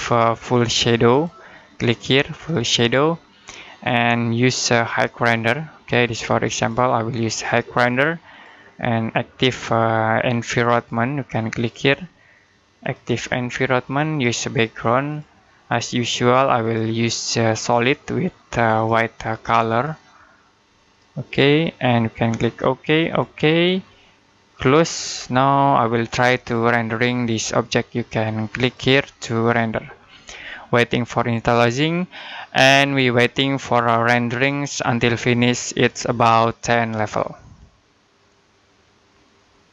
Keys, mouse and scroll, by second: 0.9 click, 28.5 click.